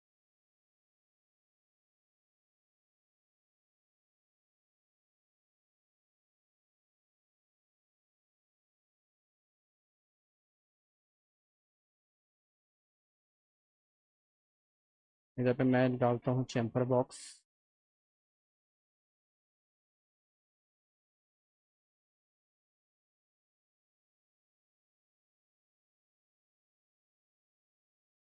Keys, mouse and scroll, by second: 0.1 click, 0.7 click, 1.1 click, 2.4 click, 4.0 click, 5.2 click, 6.2 click, 8.2 click, 9.8 click, 11.0 click, 11.8 click, 12.2 alt+middle click, 13.1 click, 14.2 click, 15.1 click, 16.2 click, 16.6 alt+middle click, 17.4 middle click, 17.8 alt+middle click, 18.7-21.1 drag, 22.6 click, 24.0 click, 24.6 alt+middle click, 25.7 click, 26.6 alt+middle click, 27.6 click.